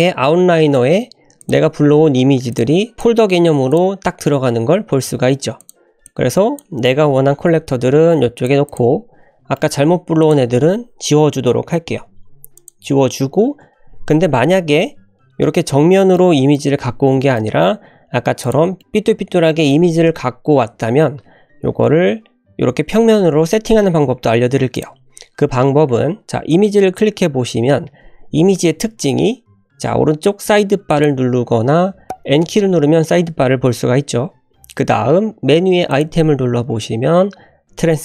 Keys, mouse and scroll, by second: 1.4 click, 1.6-2.1 scroll down 2, 2.5 shift+click, 2.9 click, 3.7 click, 4.4-4.9 scroll down 2, 5.5 click, 6.0-6.6 drag, 7.0-7.5 scroll down 1, 7.5 g, 8.6 click, 8.9 scroll up 2, 9.5 shift+middle drag, 10.2 click, 12.0 Delete, 12.5 click, 13.0 Delete, 15.2-15.5 scroll down 2, 15.5 shift+middle click, 16.1-16.5 middle drag, 17.3 shift+middle click, 17.8-18.4 scroll up 3, 18.4 click, 18.7-19.8 middle drag, 19.5 scroll up 1, 21.8 scroll down 1, 24.7 click, 25.2-26.2 scroll up 1, 26.4-27.1 drag, 29.4 l, 30.9 click, 32.4 n, 32.8 n, 35.9 click.